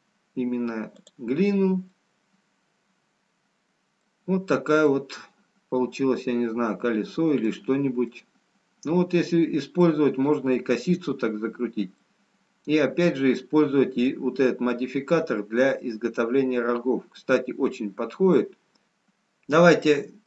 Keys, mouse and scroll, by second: 2.3 middle click, 8.6 scroll down 2, 13.4 middle click, 15.2-15.8 scroll down 1, 16.9 scroll up 3, 18.6 middle click, 18.6 scroll down 1.